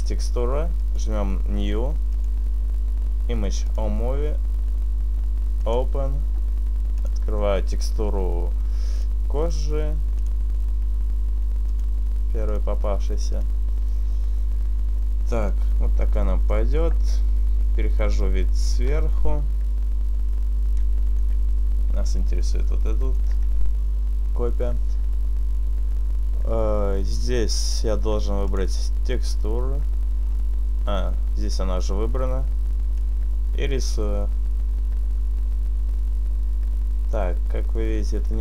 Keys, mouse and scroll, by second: 1.1 click, 2.2 click, 5.8 click, 13.6 click, 16.4 middle click, 17.9 KP_7, 21.4 shift+middle click, 28.6 click, 29.6-30.1 scroll down 1, 30.6-32.2 scroll down 1, 33.7 click.